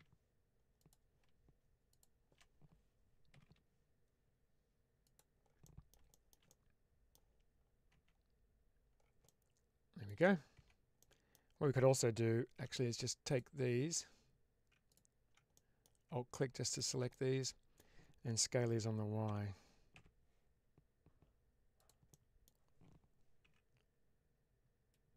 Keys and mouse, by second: 1.8 shift+click, 3.2 g, 4.4 g, 4.9 click, 5.5 middle click, 6.0 middle click, 6.4 middle click, 7.8 Tab, 9.1 middle click, 10.4 Tab, 10.9 middle click, 12.5 2, 14.8 alt+click, 15.4 middle click, 16.5 alt+shift+click, 17.0 middle click, 19.1 s, 19.8 y, 21.7 click, 22.1 middle click, 23.3 1.